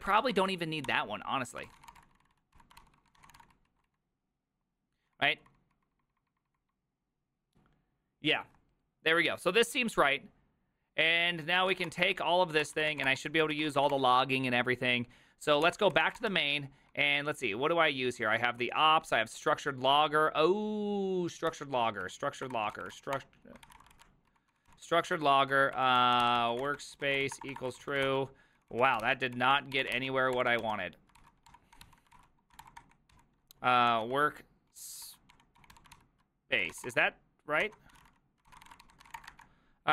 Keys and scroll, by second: 38.0-39.6 typing.